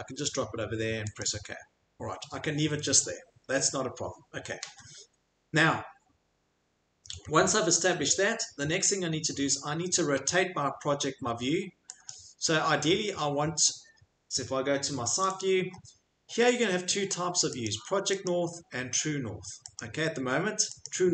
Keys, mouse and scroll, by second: 1.2 click, 3.5 click, 7.1 scroll, 7.9-8.6 scroll, 8.6 scroll, 9.3-9.9 scroll, 12.1 click, 12.1 scroll, 13.4 scroll, 15.2 click, 15.4 click, 17.6 click, 18.2 click, 19.7 click, 20.8 click.